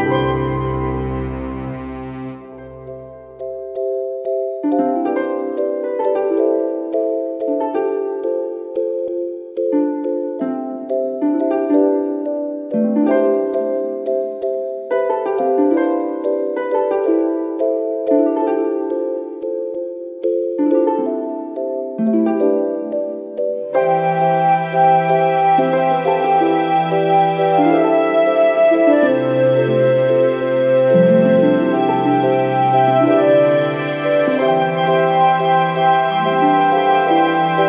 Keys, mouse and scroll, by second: 1.4-3.1 drag, 3.9 click, 4.2 click, 5.2 0, 5.8 scroll down 2, 7.1 ctrl+click, 7.8 ctrl+click, 9.1 click, 10.8 click, 11.3 space, 11.7 click, 12.6 1, 13.0 2, 14.0-14.3 scroll up 2, 14.6 scroll down 2, 15.1 0, 15.7 scroll down 2, 16.2 scroll up 2, 17.4 click, 17.9 ctrl+click, 19.4 click, 20.6 click, 21.6 click, 23.0 click, 27.0 click, 28.6 scroll down 2, 29.0 scroll up 2, 31.6 click, 34.2 click, 35.5 scroll down 1, 35.8-36.2 scroll up 1.